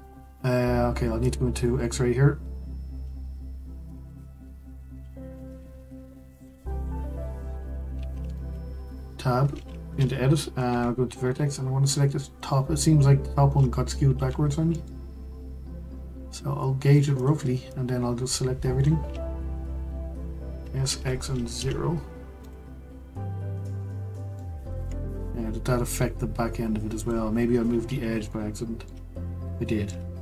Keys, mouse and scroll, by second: 1.2-4.0 drag, 4.0 1, 6.3 click, 6.7 click, 8.7 Tab, 10.6 1, 11.4 click, 14.1 g, 17.7 click, 20.6 s, 23.5-24.3 scroll down 4, 24.3-26.9 middle drag, 26.9 click, 28.3-30.2 shift+middle drag.